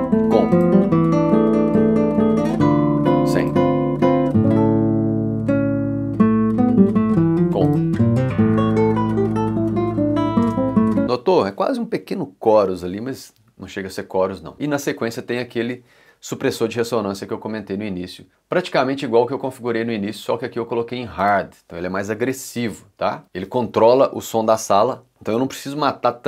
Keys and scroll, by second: 10.4 space, 15.8 2.